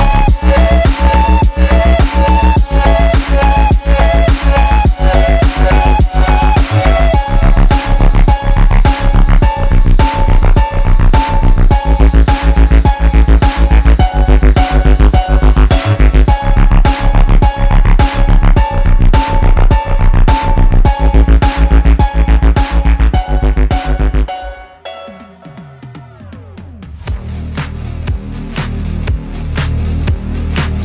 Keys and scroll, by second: 21.5-22.3 typing, 27.4-29.3 typing, 29.7 Return.